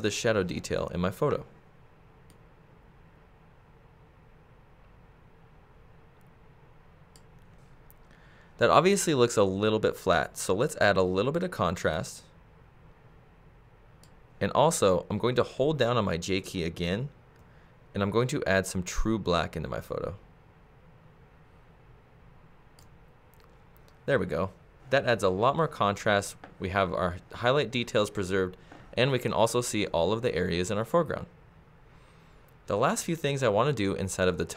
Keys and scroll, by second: 17.4 j.